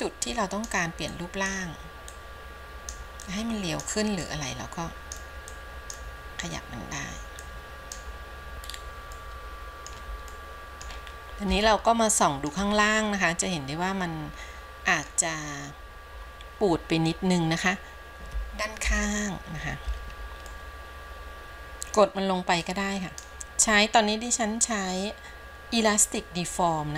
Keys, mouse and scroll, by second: 0.1 click, 1.3 click, 2.3 click, 3.5 click, 4.5 click, 5.8 click, 7.6 click, 8.9-9.4 scroll down 2, 9.4 middle click, 10.6 middle click, 11.2-11.7 scroll up 1, 11.9 shift+middle click, 13.0-13.7 scroll up 2, 13.7-15.3 middle drag, 15.7 scroll down 1, 19.0 KP_3, 20.7 shift+middle click, 21.5 click, 22.9 click.